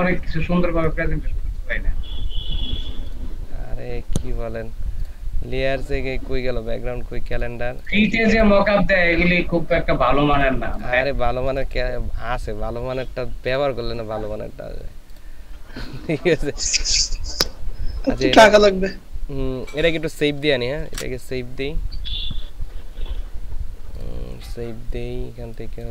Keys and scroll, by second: 20.9 ctrl+alt+shift+s.